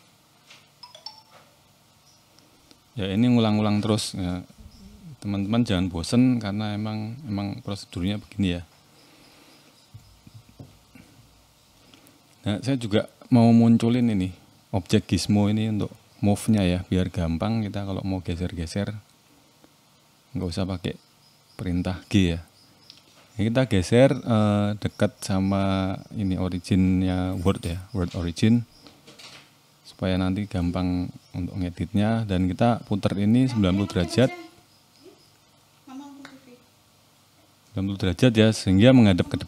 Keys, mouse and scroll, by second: 0.6-1.0 scroll down 5, 1.0 shift+middle click, 1.3-1.7 scroll up 2, 1.7 click, 2.1 shift+middle click, 2.4-2.8 scroll up 2, 2.8 Tab, 3.2-3.6 scroll up 1, 3.6 click, 4.8 shift+s, 6.0 Tab, 6.6 right click, 8.3-8.8 scroll down 6, 8.8 shift+middle click, 10.9 click, 15.5 click, 17.4 middle click, 18.0 scroll up 3, 18.3 shift+middle click, 18.9 middle click, 19.3-20.6 scroll down 7, 20.6-20.9 scroll down 1, 20.9 KP_7, 21.7 a, 22.0 shift+middle click, 22.9 g, 25.7 click, 26.1-27.0 scroll up 5, 27.0 click, 27.9 KP_Decimal, 28.6 middle click, 29.1-30.0 scroll down 4, 30.0 shift+middle click, 30.5-30.8 scroll down 1, 30.8 middle click, 31.4 r, 36.1 click, 37.7 middle click, 38.5 click, 38.8 click, 39.2 shift+middle click.